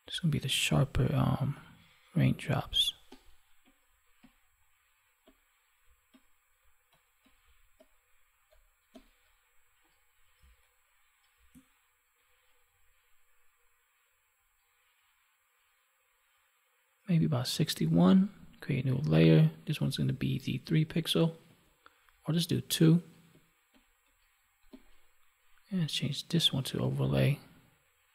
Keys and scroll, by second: 10.3 space.